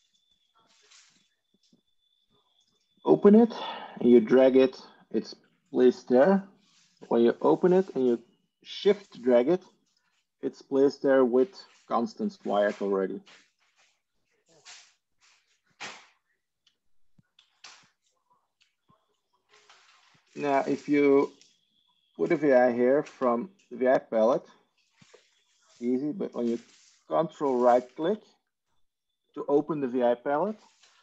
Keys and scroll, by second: 6.1 Delete.